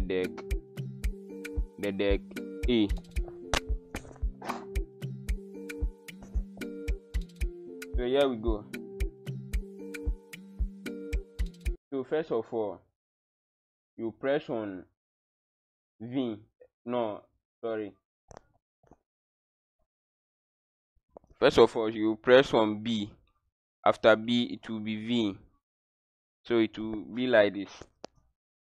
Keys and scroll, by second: 11.0 w, 11.7 q, 15.2 Tab.